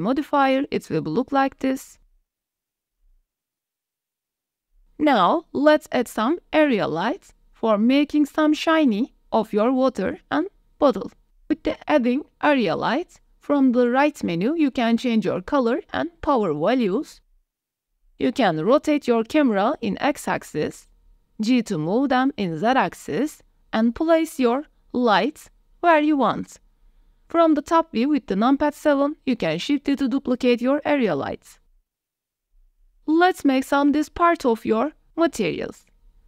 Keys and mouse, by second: 2.4 click, 3.0 click, 3.9 middle drag, 4.2 middle click, 4.5 g, 4.6 x, 5.6 shift+a, 8.0-8.5 drag, 9.3 g, 9.8 z, 11.1 click, 11.6 g, 12.1 y, 13.0 click, 13.5 click, 14.5 click, 14.8 r, 15.0 x, 15.5 click, 16.0 click, 16.4 KP_0, 17.0 drag, 17.4 click, 17.6 click, 17.8 g, 17.8 z, 18.6 g, 18.9 y, 20.4 r, 20.9 x, 22.6-23.3 drag, 24.0-25.5 typing, 25.1 click, 26.8-27.5 drag, 27.6 drag, 27.8 middle click, 28.1 middle click, 28.4 KP_7, 28.9 shift+d, 29.6 r, 31.1 KP_0, 32.2 g, 32.8 x, 33.7 ctrl+s.